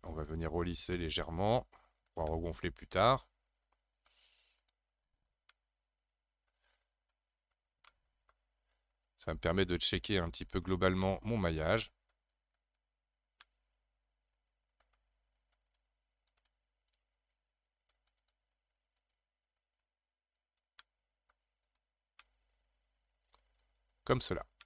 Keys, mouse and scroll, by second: 0.9-4.6 middle drag, 4.6 click, 5.5-7.1 middle drag, 7.1 click, 7.9 middle click, 8.7-11.0 drag, 11.0-12.1 shift+middle drag, 12.1-13.5 drag, 13.5-15.5 middle drag, 15.5-17.3 drag, 17.3-17.9 scroll down 1, 17.9-20.8 drag, 20.8 middle click, 21.7 click, 22.1-24.6 middle drag.